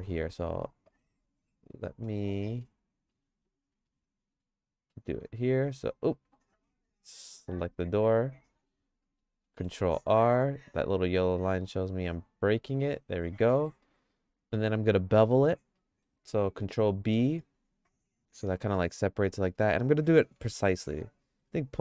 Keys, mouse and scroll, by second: 0.1 ctrl+r, 2.3 middle click, 2.7 shift+middle click, 3.9 ctrl+r, 6.8 click, 7.3 click, 9.4 ctrl+r, 13.5 middle click, 13.8 shift+middle click, 15.7 middle click, 17.3 ctrl+b.